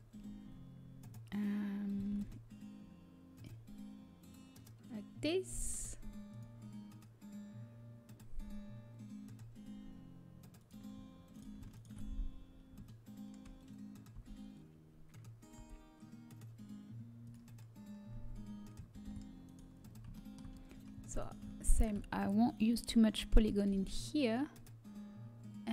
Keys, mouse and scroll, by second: 2.8 alt+e, 10.3-11.3 middle drag, 11.3-12.6 drag, 11.3-13.3 right drag, 14.5 s, 18.8 ctrl+b, 20.2 middle click, 21.1-24.3 right drag, 23.2 s.